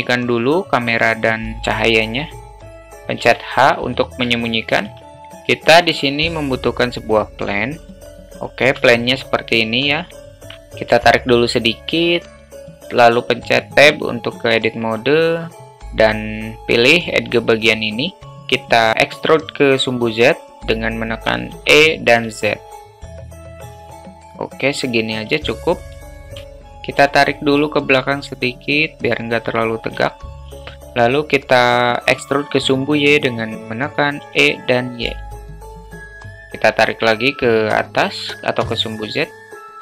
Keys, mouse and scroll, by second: 3.2 h, 4.4-4.8 alt+shift+middle drag, 5.2 shift+a, 8.0 alt+middle drag, 8.5 alt+shift+middle drag, 8.9 alt+middle click, 9.7-10.2 alt+middle drag, 10.4 ctrl+z, 11.2-11.9 drag, 12.1 alt+middle drag, 13.7 Tab, 21.5 e, 25.4 alt+middle click, 26.1 alt+shift+middle click, 26.5 alt+middle click, 27.6-29.8 drag, 30.1 alt+middle click, 34.2 e, 36.5-38.5 drag, 39.2 alt+middle click.